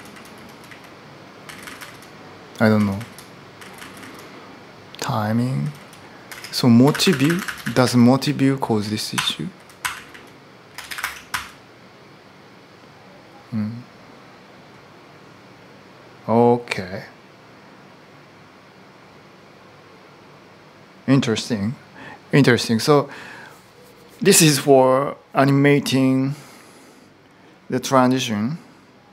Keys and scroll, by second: 0.0-3.5 typing, 5.4-11.1 typing, 10.8 Return.